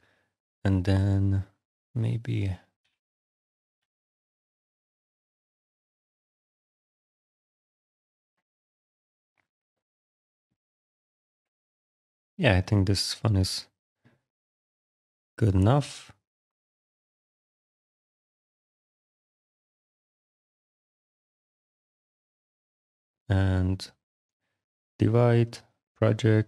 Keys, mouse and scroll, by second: 1.8 click, 2.6 6, 4.0 Return, 4.7 alt+click, 12.1 click, 13.0 click, 15.2 click, 17.5 click, 18.1 click, 20.3 click, 21.3 click, 21.9 ctrl+d, 22.8 click, 25.4 click.